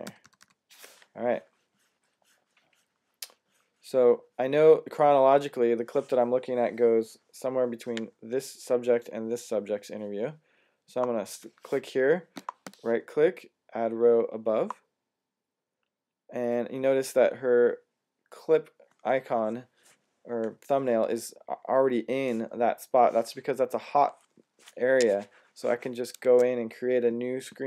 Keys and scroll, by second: 0.2 alt+super+-, 0.4 alt+super+-, 26.1 Tab.